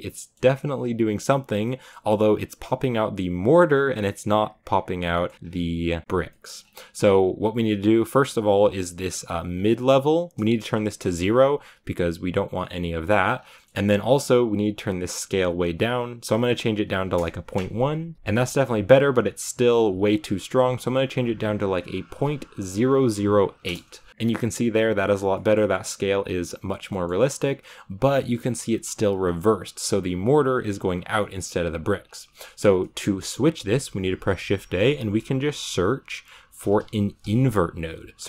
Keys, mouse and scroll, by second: 0.0-2.6 middle drag, 2.6-3.2 scroll up 1, 3.2 scroll up 1, 3.8-5.0 scroll up 1, 5.2-6.1 scroll up 1, 6.1-10.9 scroll up 1, 10.9-13.3 drag, 13.3 scroll down 4, 13.4-17.1 middle drag, 17.1-18.1 drag, 18.1 scroll up 2, 18.3-23.6 middle drag, 23.6 0, 24.1 shift+middle click, 25.0 scroll down 1, 25.2-28.2 middle drag, 28.2-31.7 scroll down 1, 31.7-36.8 scroll down 1.